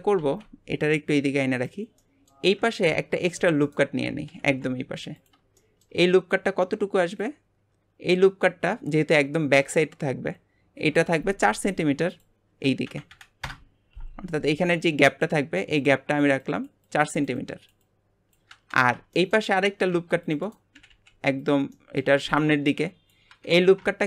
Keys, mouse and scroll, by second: 0.2 alt+z, 1.0 click, 2.0 middle click, 2.9 ctrl+r, 4.3 g, 5.6 shift+middle click, 6.1-6.5 scroll up 2, 7.2 click, 12.1-18.8 drag, 18.8 scroll down 4, 19.1 shift+middle click, 19.9 ctrl+r, 20.8 g, 21.7 middle click, 22.2 scroll up 3.